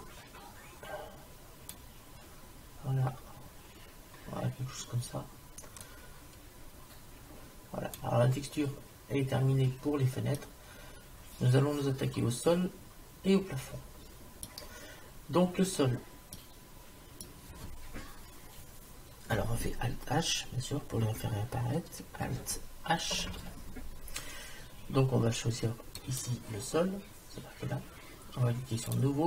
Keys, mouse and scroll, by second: 5.9 click, 7.5 click, 10.4-12.4 middle drag, 15.8-18.2 middle drag, 15.8-16.7 scroll down 1, 23.3 alt+h, 26.0-27.9 drag, 28.9-29.2 drag.